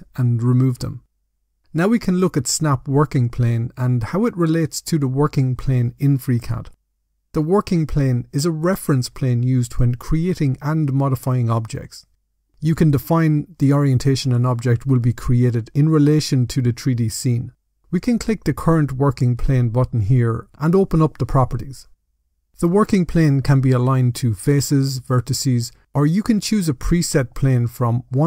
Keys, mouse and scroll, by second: 18.5 click.